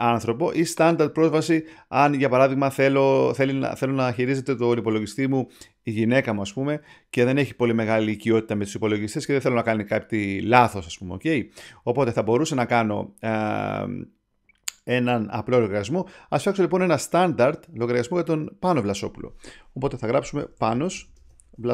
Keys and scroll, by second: 20.1-21.7 typing.